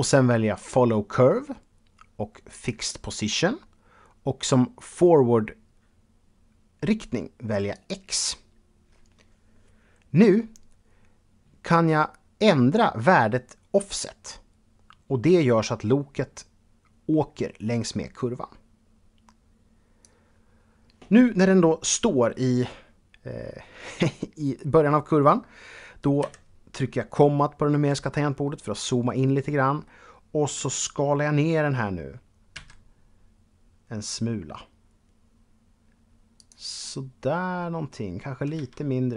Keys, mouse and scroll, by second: 0.1 click, 2.1 click, 7.3 click, 13.5-19.8 drag, 25.8 KP_Decimal, 28.0 middle click, 32.1 s, 35.9 click, 36.4 middle click, 38.1 s, 38.8 click.